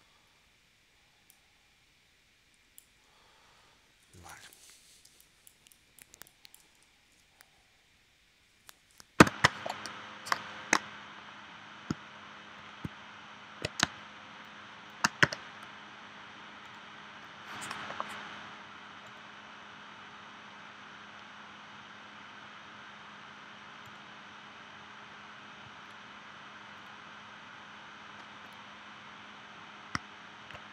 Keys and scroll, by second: 5.1 space, 6.9 super+s, 9.2 shift+super+p, 13.8 space, 15.2 v.